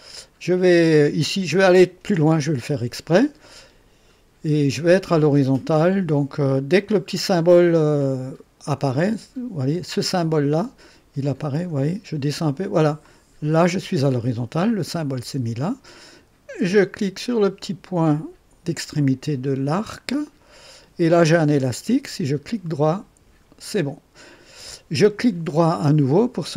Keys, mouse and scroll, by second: 2.6 click, 13.0 click, 19.9 click, 22.6 middle click.